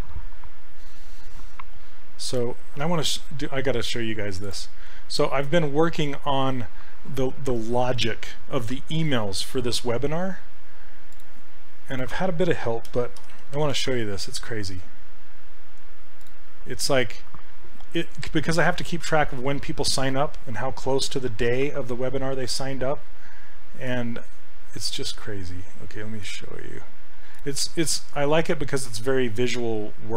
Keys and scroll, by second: 12.9 d, 13.6 p, 13.8 Return.